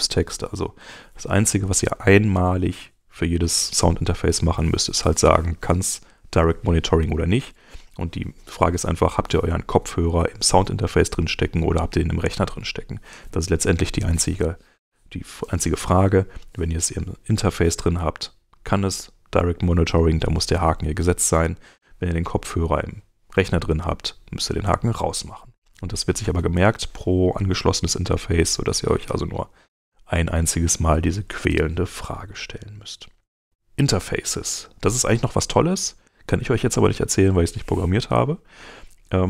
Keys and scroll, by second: 33.0 super+Tab.